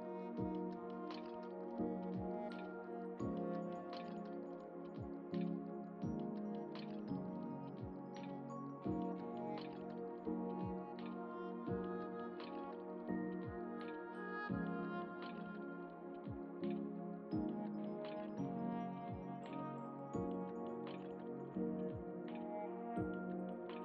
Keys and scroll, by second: 21.4 Delete, 23.2 ctrl+d.